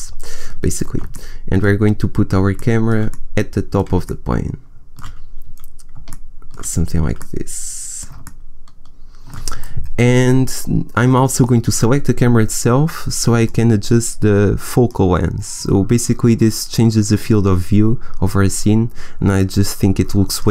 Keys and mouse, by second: 8.5-11.1 middle drag, 11.3-13.0 right drag, 13.0 middle click, 13.4-16.2 drag, 16.5-19.2 middle drag.